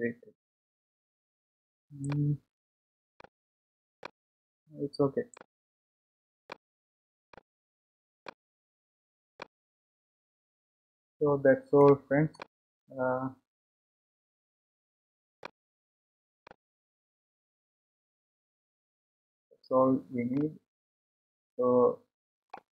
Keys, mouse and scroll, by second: 0.7 Delete, 2.0-10.8 drag, 10.8-11.9 scroll up 5, 11.9 middle click, 12.7-14.9 scroll down 7, 12.9-19.4 middle drag, 14.9-15.5 scroll down 1, 19.4-20.3 scroll up 2, 20.3-22.7 middle drag.